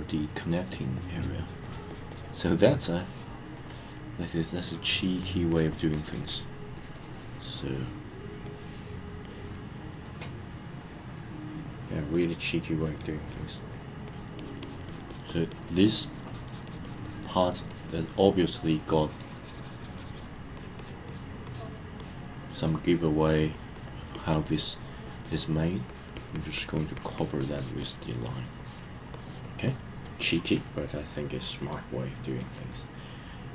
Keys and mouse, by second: 0.7 click, 1.0 click, 1.2 click, 1.4 click, 1.6 click, 1.9 click, 2.1 click, 2.7 click, 2.9 click, 3.6 click, 4.7 click, 5.0 click, 5.2 click, 5.5 click, 5.7 click, 5.9 click, 6.1 click, 6.3 click, 6.8 click, 6.9 click, 7.7 click, 8.5 click, 9.2 click, 12.1 middle click, 14.1 click, 14.4 click, 14.6 click, 14.9 click, 15.1 click, 15.3 click, 15.5 click, 15.7 click, 15.9 click, 16.1 click, 16.3 click, 16.5 click, 16.7 click, 16.8 click, 17.0 click, 17.2 click, 17.5 click, 17.7 click, 17.9 click, 18.6-20.3 drag, 20.6 click, 20.8 click, 21.1 click, 21.5 click, 22.0 click, 22.6 click, 23.3 click, 23.6 click, 23.8 click, 24.1 click, 24.3 click, 25.1 click, 25.2 click, 25.9 click, 26.2 click, 26.3 click, 26.6 click, 26.8 click, 27.0 click, 27.2 click, 27.4 click, 27.6 click, 27.8 click, 28.2 click, 28.6 click, 29.1 click, 29.7 click, 30.9 middle click, 32.4-33.5 middle drag.